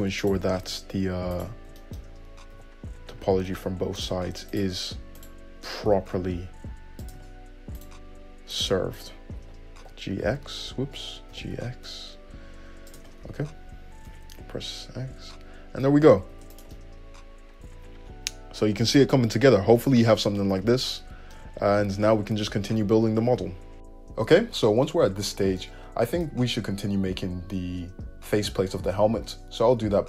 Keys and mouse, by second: 0.4 click, 0.5-1.6 middle drag, 1.6 ctrl+click, 1.7-4.7 ctrl+shift+middle drag, 2.8 g, 4.7 click, 4.9 middle click, 5.4 click, 5.5-8.0 middle drag, 6.1 g, 8.0 click, 8.1 middle click, 8.7 click, 8.8 middle click, 9.2 click, 10.4 x, 11.6 g, 13.2-16.8 middle drag, 13.5 `, 14.3 `, 15.7 Tab, 16.6 alt+z, 16.8 click, 16.9-30.0 middle drag, 21.9 `.